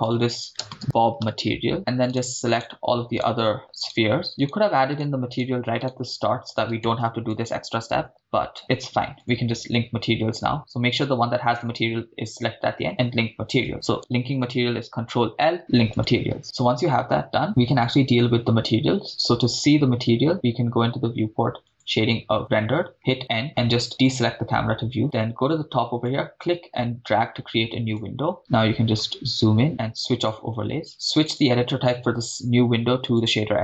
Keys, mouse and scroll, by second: 2.1 click, 2.1 right click, 2.7-3.1 shift+drag, 2.7 shift+right click, 3.3-4.0 shift+drag, 8.1 ctrl+l, 14.8 ctrl+l, 22.0 click, 23.2 n, 24.1 click, 24.5 n, 26.4-28.1 drag, 28.4 ctrl+middle click, 30.3 click, 31.3-33.3 drag.